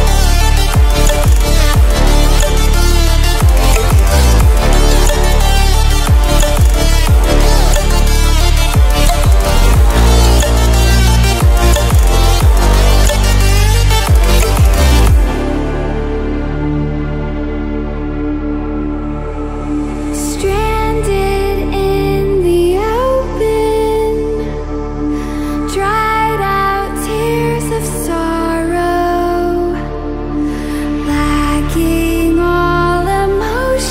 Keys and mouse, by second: 0.0-2.6 typing, 2.8 Return, 4.2 click, 6.4-18.2 drag, 22.8 Return, 23.0-29.7 typing, 31.5 Return, 32.1-33.9 typing.